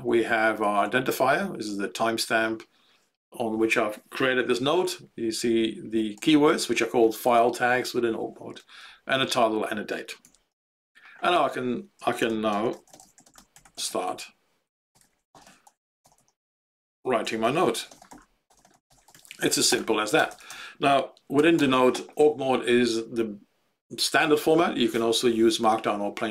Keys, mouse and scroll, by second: 0.0 Up, 0.8 End, 4.8 Up, 5.5 Home, 6.1 End, 8.7 Up, 9.0 Up, 10.2 Home, 10.6 ctrl+End, 12.1-21.3 typing, 21.5 Return.